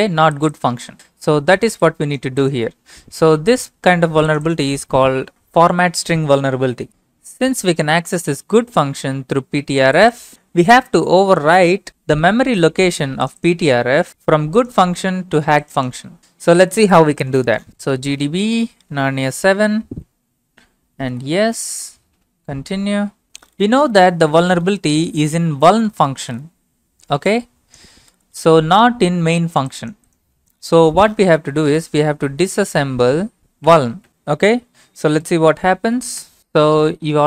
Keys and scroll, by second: 17.4-22.2 typing, 31.8-34.6 typing, 35.2 Return, 36.2 typing.